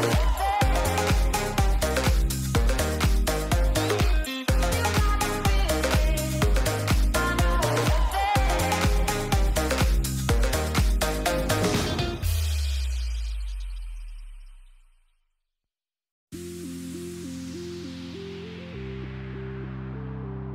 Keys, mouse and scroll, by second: 2.3-4.3 drag, 5.8 click, 6.3 click, 8.2 click, 8.6 Tab, 9.5-10.8 drag, 11.0-12.0 drag, 13.0 middle click, 13.4 shift+middle drag, 14.0 middle click, 14.7 click, 15.7 shift+middle click, 16.8-17.2 shift+middle drag, 17.2 click, 18.1-19.3 drag.